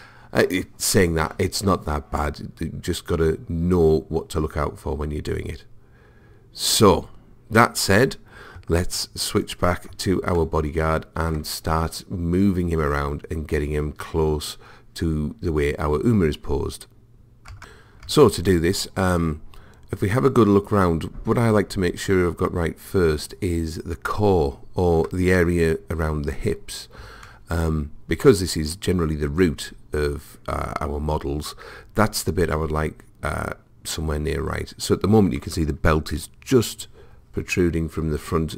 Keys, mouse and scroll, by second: 9.4 click, 11.2-12.3 middle drag, 18.2-20.3 middle drag, 27.3-29.3 middle drag, 36.8-38.5 middle drag.